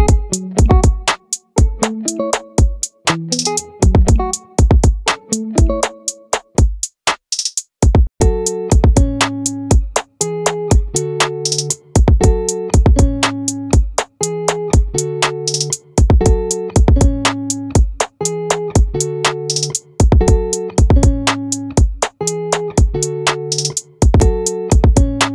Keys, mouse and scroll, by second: 2.7 a, 10.9-14.1 drag, 14.1-15.7 right drag, 15.7-18.0 middle drag.